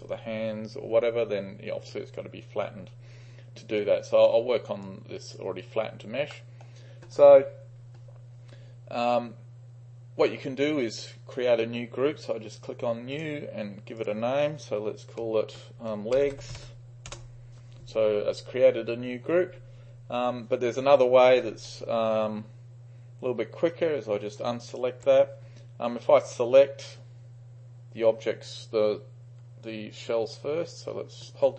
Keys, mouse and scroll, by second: 3.8 right click, 4.9 click, 5.8 right click, 6.4 middle click, 13.2-15.2 drag, 15.9-17.1 typing, 23.7 click, 24.8 ctrl+click, 29.8-30.8 shift+drag.